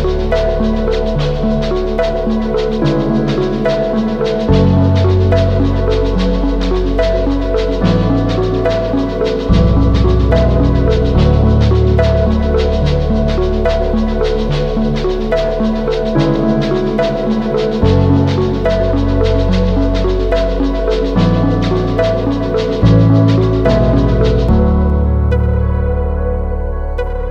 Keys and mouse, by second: 1.6 Tab, 2.5-3.2 drag, 3.6 KP_3, 3.7 z, 4.4 shift+click, 5.4 z, 5.5-6.0 drag, 6.1 Tab, 7.9-9.2 drag, 9.7 g, 12.4 g, 14.4-14.9 drag, 15.0 drag, 15.3 Tab, 15.5-18.2 drag, 19.1 KP_3, 19.5 t, 19.9 t, 20.2 z, 24.0 z, 24.1-26.2 drag, 26.2 middle click, 26.7 shift+middle click.